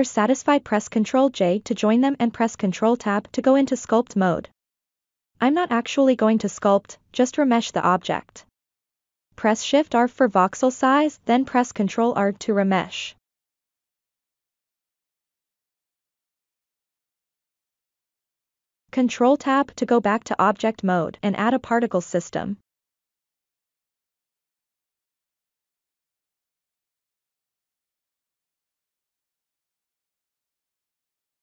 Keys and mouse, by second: 1.9 ctrl+j, 3.4 ctrl+Tab, 9.7 shift+r, 14.7 ctrl+r, 18.8 ctrl+Tab, 25.2 click, 28.6-29.7 drag, 30.1-31.4 drag.